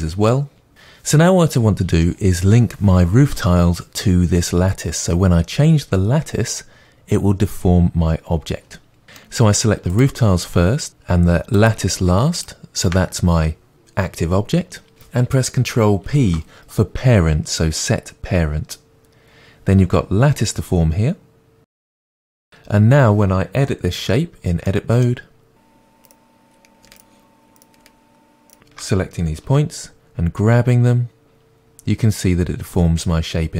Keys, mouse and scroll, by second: 9.2-10.0 middle drag, 10.0 click, 11.6 shift+click, 22.5 click, 24.1 Tab, 24.7-25.8 middle drag, 26.1 click, 27.0 shift+click, 29.5 g.